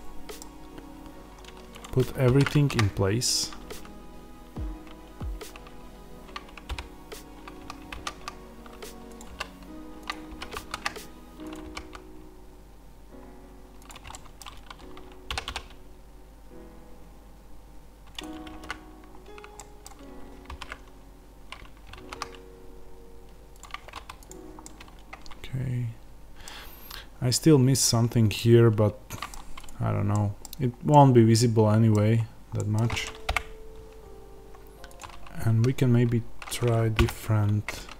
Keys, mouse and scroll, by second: 0.8 middle click, 0.8-1.7 scroll up 1, 1.7 click, 2.2 alt+d, 9.1 click, 9.2 s, 10.0 click, 10.2 g, 11.4 click, 11.6 g, 13.8 click, 14.0-18.1 middle drag, 15.3 r, 18.1 click, 19.5-23.5 middle drag, 23.5 click, 24.6-34.9 middle drag, 30.4-30.8 scroll down 1, 31.9 scroll down 1, 32.4 scroll up 1, 33.2 KP_0, 34.1-34.9 scroll down 1, 34.9 click, 36.9 n.